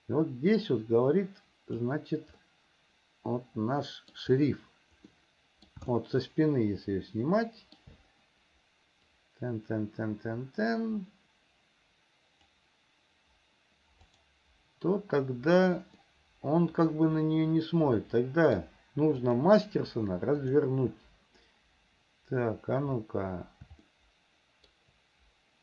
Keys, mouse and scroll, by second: 2.7-4.5 middle drag, 5.4 middle click, 6.2-8.2 shift+middle drag, 9.5-13.0 drag, 14.3 click, 16.3-19.0 middle drag, 19.5 click, 20.7 click, 24.2 shift+middle click.